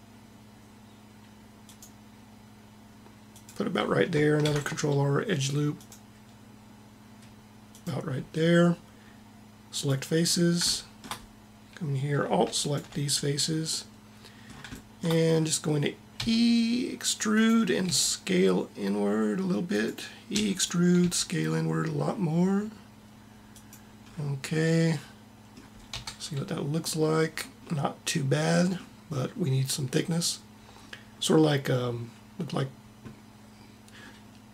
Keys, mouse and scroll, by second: 4.4 ctrl+r, 5.8 ctrl+r, 9.7-10.7 drag, 10.7 middle click, 11.3 click, 16.1 e, 17.8 s, 20.3 e, 21.0 s, 24.0-25.9 middle drag, 25.9 Tab, 32.6-33.8 middle drag.